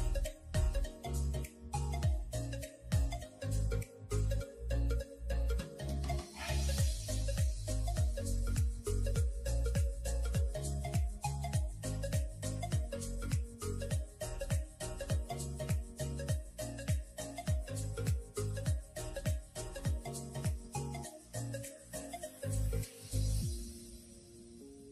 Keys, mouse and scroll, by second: 5.7-6.7 middle drag, 6.7 scroll down 4, 6.9-8.3 middle drag, 8.3 Tab, 8.5-10.3 right drag, 10.3-11.5 drag, 11.5 middle click, 11.9 click, 12.1 middle click, 12.8 scroll up 2, 13.1 middle click, 13.5-13.9 scroll down 2, 13.9-14.2 middle drag, 14.2 click, 14.6 KP_1, 14.9 scroll up 3, 15.1 s, 16.4 middle click, 16.9 click, 17.1 Tab, 17.2-17.7 scroll up 2, 17.7 ctrl+r, 19.6 middle click, 20.1-20.8 scroll down 8, 20.3 shift+middle click, 20.8 click, 20.9 Tab, 21.0 click, 21.2-21.9 middle drag, 21.9 scroll down 2, 22.1-23.4 shift+middle drag, 23.4-24.1 scroll up 2, 24.1-24.9 scroll up 1.